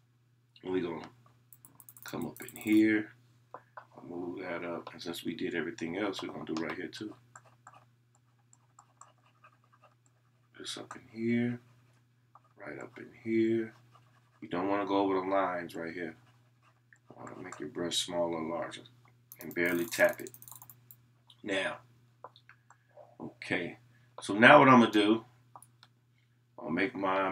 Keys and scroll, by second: 6.0 [.